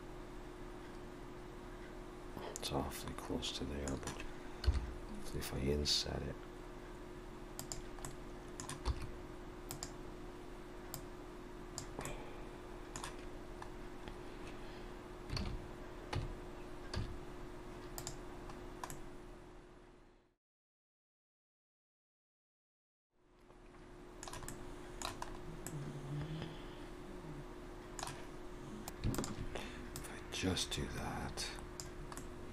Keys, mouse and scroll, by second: 8.0 middle click, 8.9 e, 10.9 click, 12.0 middle click, 13.6-13.9 scroll down 2, 15.4 alt+a, 16.2 Tab, 17.0 z, 18.5-18.9 scroll down 2, 18.9 middle click, 21.3 scroll up 1, 21.5 middle click, 22.1-22.5 scroll down 2, 22.5 shift+middle click, 22.9 middle click, 24.5 middle click, 25.3-25.7 scroll up 2, 25.7 middle click, 28.6 ctrl+z, 28.6 alt+a, 29.2 alt+shift+click, 30.0 click.